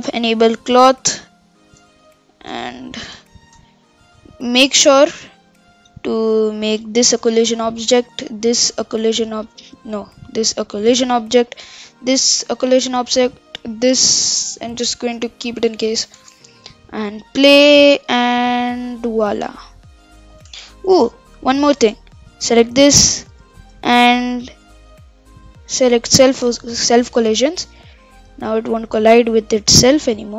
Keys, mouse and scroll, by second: 0.4-1.5 drag, 1.5-2.4 middle drag, 2.4-3.1 scroll down 1, 4.1-5.0 middle drag, 5.0 click, 6.9 click, 8.4-10.0 drag, 10.0 ctrl+z, 10.9 click, 12.5-13.6 drag, 15.0-16.2 drag, 16.2 shift+space, 20.6 shift+space, 21.5 shift+Left, 22.3 click, 22.8-26.1 scroll down 34, 26.1 click, 26.5 shift+space.